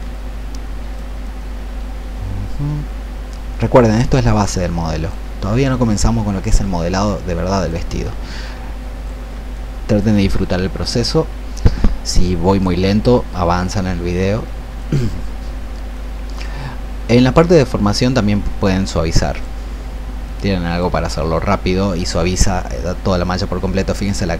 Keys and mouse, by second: 0.1-3.7 drag, 4.5 click, 5.7 shift+click, 7.1 shift+click, 8.3 click, 9.6 shift+click, 11.4-24.3 drag.